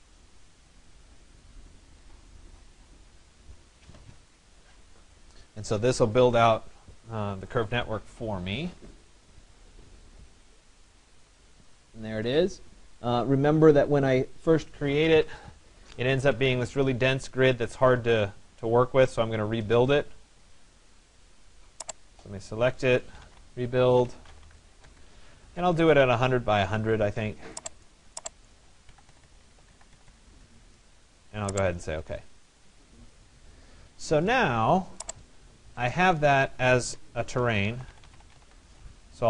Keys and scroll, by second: 23.9 d, 24.9 Return, 28.4 1, 29.1 0, 29.4 Tab, 29.7 1, 31.0 0.